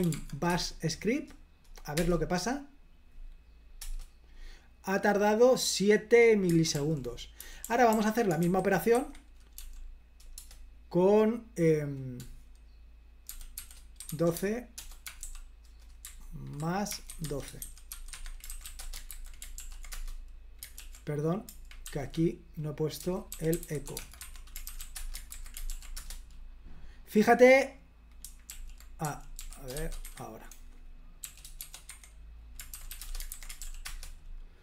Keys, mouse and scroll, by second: 0.0-0.6 typing, 2.0 Return, 3.9 Return, 6.8 super+l, 7.2-10.2 typing, 9.0 Escape, 10.4 Return, 13.1-15.1 typing, 16.5-19.1 typing, 19.2 super+h, 19.6 ctrl+p, 20.0 Return, 21.9 super+l, 22.9-25.4 typing, 25.4 super+h, 25.8 ctrl+p, 26.1 Return, 28.6 super+l, 29.1-29.8 typing, 30.1 Escape, 31.3-33.3 typing, 32.0 Escape, 33.4 super+h, 33.7 ctrl+p, 33.9 Return.